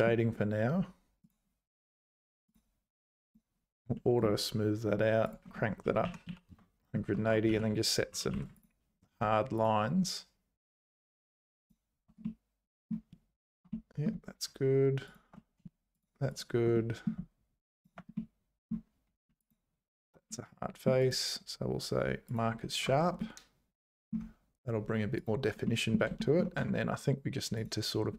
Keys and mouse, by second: 0.0 click, 2.5 click, 3.3 click, 5.4-6.9 drag, 7.1 Tab, 7.5 z, 8.1 3, 8.3 2, 8.6 alt+click, 12.2 middle click, 13.7 middle click, 16.0 shift+click, 16.7 middle click, 16.9 middle click, 17.8 shift+click, 18.1 middle click, 19.4 alt+shift+click, 20.3 middle click, 21.0-22.9 right drag, 22.9 Tab, 23.2 middle click, 25.1 click, 25.6 middle click, 26.2 shift+click, 26.6 Tab, 27.5 click.